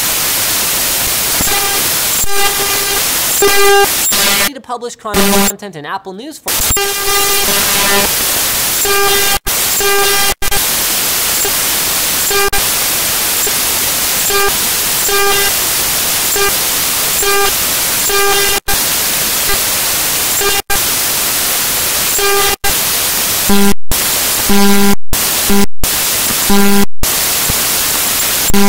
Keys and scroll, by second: 23.4 `.